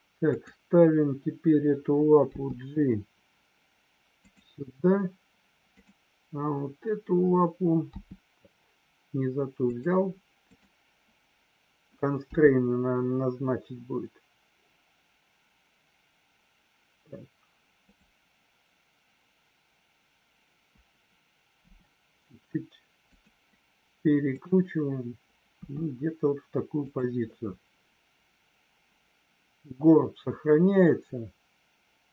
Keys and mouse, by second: 2.4 g, 5.7 click, 7.8 g, 9.7 click, 10.4-11.1 drag, 12.2 g, 21.6 r, 23.0 click, 24.2 click, 25.6 r, 26.8 click.